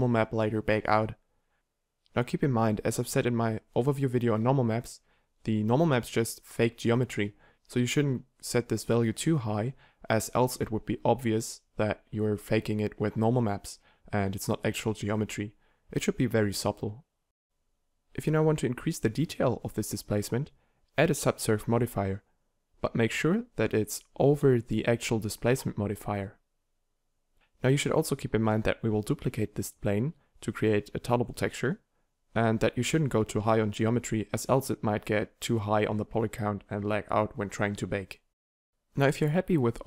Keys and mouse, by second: 9.6-14.7 middle drag, 17.5-24.4 middle drag, 24.8-38.7 middle drag.